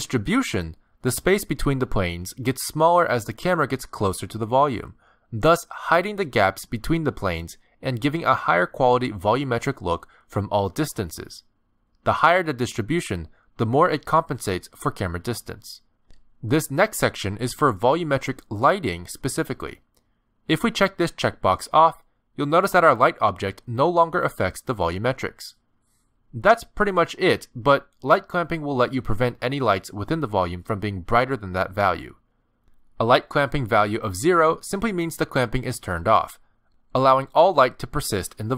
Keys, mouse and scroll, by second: 0.4 click, 6.8 click, 11.1 scroll up 1, 11.3 middle click, 13.7 click, 15.0 KP_9, 15.9 click, 16.6 click, 19.2-20.3 scroll down 7, 20.4 shift+middle click, 22.1 click, 23.3 middle click, 23.9 scroll down 1, 24.2 shift+middle click, 24.6 middle click, 26.0 shift+middle click, 26.5 middle click, 28.3 click, 29.1 click, 35.4 middle click, 36.7 middle click, 37.9 middle click.